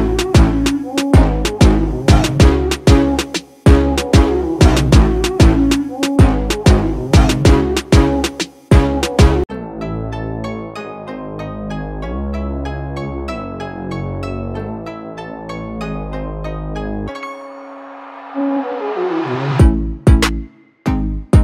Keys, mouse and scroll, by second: 0.6-1.1 alt+scroll down 1, 1.3 space, 1.4-4.8 drag, 4.8 space, 5.0 click, 5.3 space, 6.5 click, 7.7 right click, 9.2-15.5 drag, 15.7-20.0 shift+drag, 20.4 alt+scroll down 1, 21.0 space, 21.3 click.